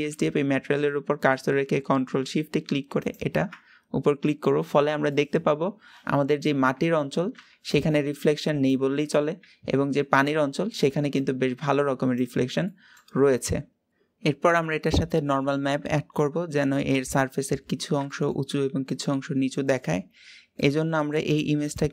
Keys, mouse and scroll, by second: 5.0-13.0 middle drag, 13.0-13.9 scroll down 3, 16.9-17.5 scroll up 2, 17.5-17.9 scroll down 1, 17.9-21.5 shift+middle drag, 21.5 click.